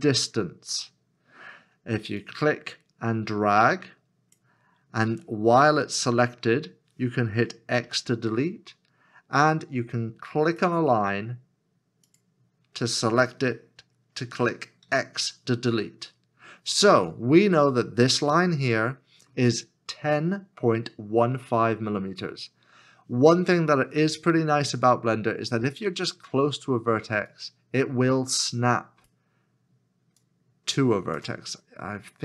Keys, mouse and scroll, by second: 14.8 x, 31.6 scroll up 1.